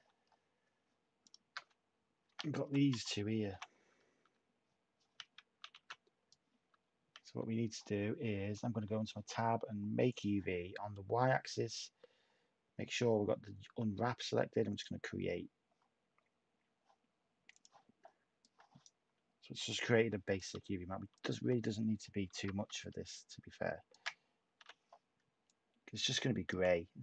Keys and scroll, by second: 2.2-4.2 typing, 5.7-7.2 typing, 20.5 \, 22.2 h, 24.5 h.